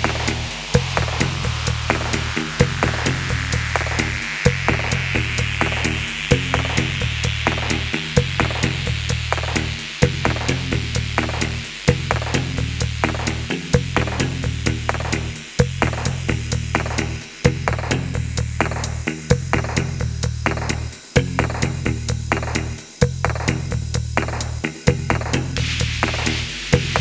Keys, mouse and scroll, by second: 0.0-0.4 typing, 0.4 middle click, 0.7 scroll down 1, 1.0 middle click, 1.4-2.0 scroll up 1, 2.8-4.3 typing, 6.1-7.4 typing, 6.1 middle click, 9.7-10.4 typing, 10.6 shift+click, 11.9 ctrl+z, 12.7 middle click, 14.3 middle click, 17.3 ctrl+a, 17.3 right click, 19.0-24.1 typing, 19.4 shift+click, 20.4-20.8 scroll up 1, 23.6-24.0 scroll down 1, 24.8 shift+middle click, 25.6 typing, 26.4 shift+click.